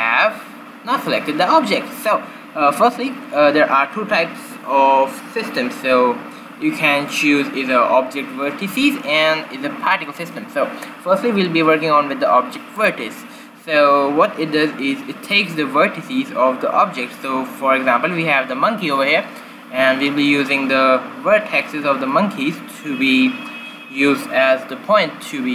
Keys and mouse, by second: 12.7-14.6 drag.